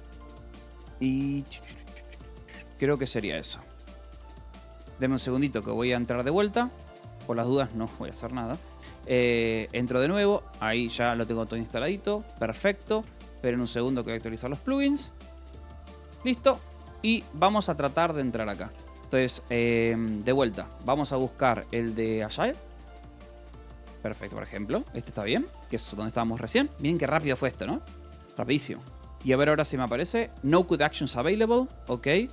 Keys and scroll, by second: 0.0-1.1 typing, 2.6-3.8 typing, 4.4 ctrl+s, 5.0 Return, 6.7 m, 7.1 n, 8.7-9.6 typing, 11.8 q, 12.9 space, 13.0 l, 14.0 shift+u, 16.0 Escape, 17.7 q, 18.6 space, 18.7 o, 20.0 s, 21.8-23.3 typing, 24.1 Return, 24.9 j, 28.6 space, 28.7 c, 29.0 a, 30.1-31.2 typing.